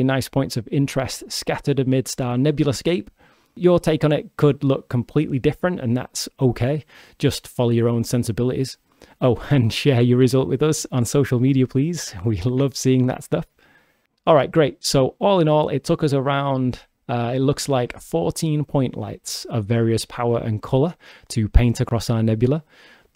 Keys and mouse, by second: 2.3 click, 3.0 click, 4.2-6.0 shift+drag, 6.4-7.4 shift+drag, 7.4-10.3 shift+middle drag, 8.4 shift+d, 10.3 drag, 11.2 click, 13.5 g, 16.2 shift+right click, 22.5 g.